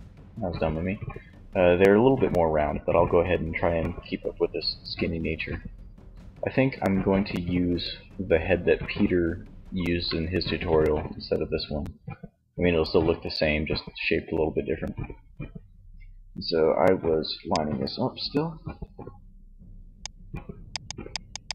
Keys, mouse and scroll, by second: 16.7 click, 17.3-18.5 drag, 19.9-21.5 drag.